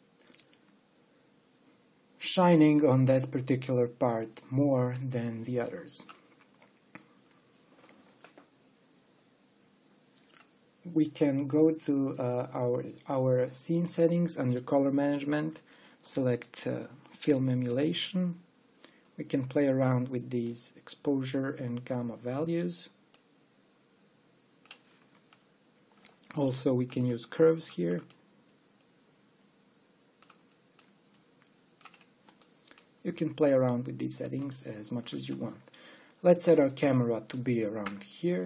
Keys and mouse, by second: 18.2 click, 21.7-23.0 drag, 23.7-25.8 drag, 27.0-30.7 drag, 31.4-33.4 drag, 33.8-34.8 drag.